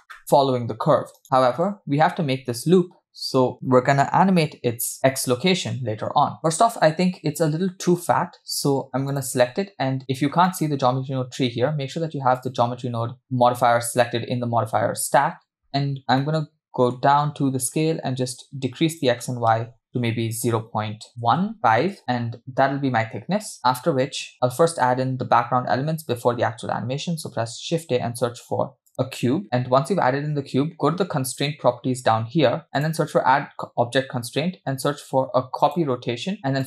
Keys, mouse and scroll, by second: 9.1 click, 10.5-11.5 middle drag, 12.4 click, 15.6-16.2 scroll up 5, 16.2 middle click, 17.3-18.0 scroll up 2, 18.4-21.5 drag, 21.6 shift+click, 27.6 shift+a, 31.3 click, 32.8-35.8 drag.